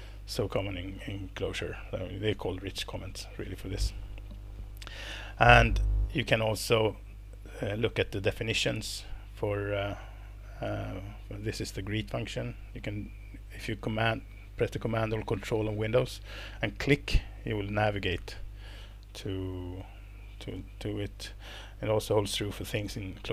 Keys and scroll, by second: 20.5 ctrl+-.